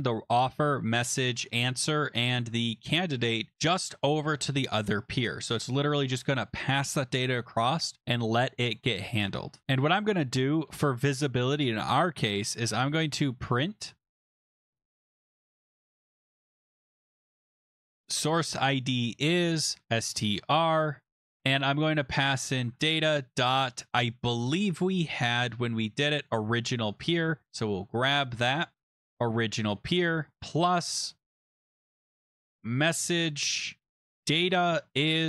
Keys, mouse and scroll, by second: 0.7 click, 3.5 click, 9.8 click, 10.6 Return, 12.4-23.3 typing, 25.0 click, 26.2 click, 26.3 click, 26.8 click, 27.0 click, 27.5 ctrl+c, 28.2 click, 28.4 click, 28.9 ctrl+v, 30.0 click, 30.1-33.8 typing.